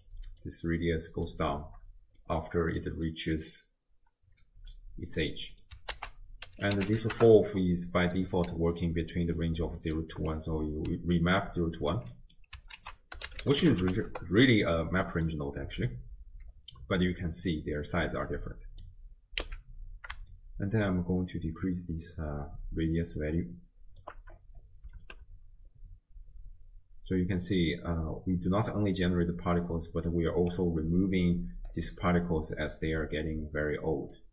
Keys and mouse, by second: 0.4 click, 2.2 middle click, 2.8 click, 5.6 click, 6.0 ctrl+a, 8.5-9.4 d, 8.8 click, 9.4 click, 9.6 d, 9.8 click, 9.8-10.3 d, 10.9 d, 11.2 click, 12.1 d, 12.2 middle click, 12.8 ctrl+a, 15.9-19.0 drag, 19.6 x, 20.3-24.0 shift+drag, 25.0 shift+space, 30.4 space, 32.1 space, 34.1-34.3 drag, 34.1 space.